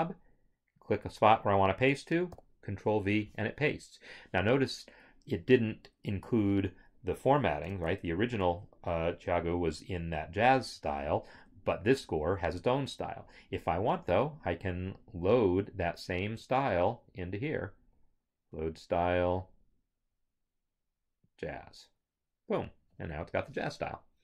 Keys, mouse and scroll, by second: 0.8 click, 2.4 ctrl+v, 7.9 ctrl+Tab, 11.3 ctrl+Tab.